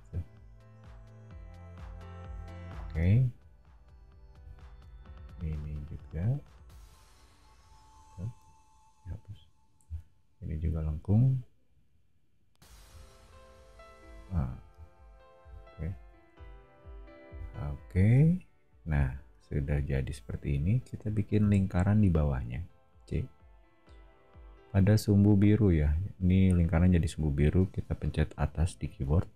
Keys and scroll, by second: 1.8 o, 4.9 a, 8.0 e, 9.8 a, 14.4 e, 16.3 o, 21.4 c, 28.4 Up.